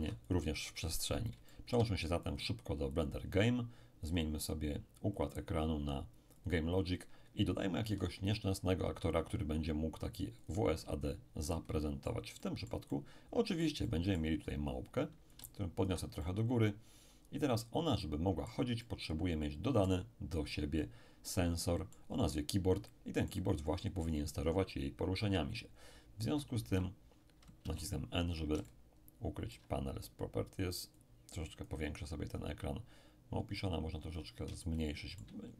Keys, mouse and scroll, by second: 0.0 x, 0.3 click, 1.5-4.0 shift+middle drag, 2.3-4.0 shift+drag, 4.1 click, 5.3 click, 6.4 click, 7.8 shift+a, 10.4-14.4 drag, 11.4-14.4 middle drag, 14.4-15.2 scroll up 1, 15.2 scroll up 1, 15.3-20.8 ctrl+drag, 16.2-20.8 ctrl+middle drag, 21.2 middle click, 21.9-22.3 scroll up 1, 22.3-24.3 middle drag, 26.6 t, 27.6 n, 28.6-30.5 ctrl+middle drag, 31.0 click, 33.6-35.5 drag, 34.6-35.5 shift+middle drag.